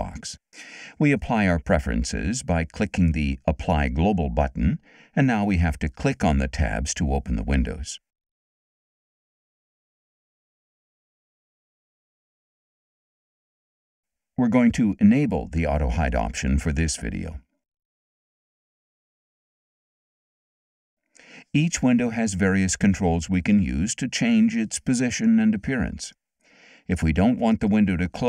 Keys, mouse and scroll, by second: 4.2 click, 7.9 click, 9.9 click, 11.2 click, 12.7 click, 15.6 click, 18.0 click, 20.4 click.